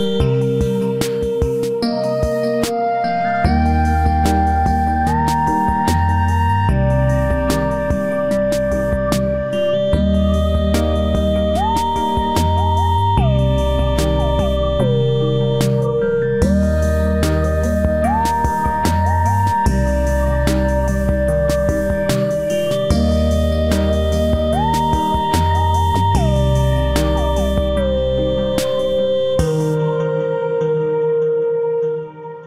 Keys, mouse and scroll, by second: 2.1 shift+middle click, 24.2 space, 26.9 k, 30.3 space, 30.4 Escape, 30.5 Escape, 32.3 shift+middle click.